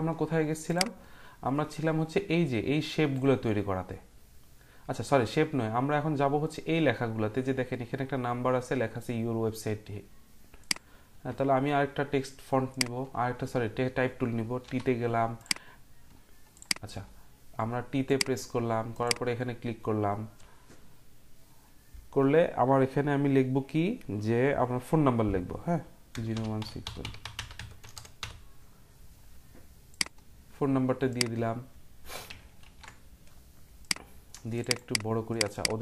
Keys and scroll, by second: 14.6 t, 25.9-29.7 typing, 32.6-33.3 typing.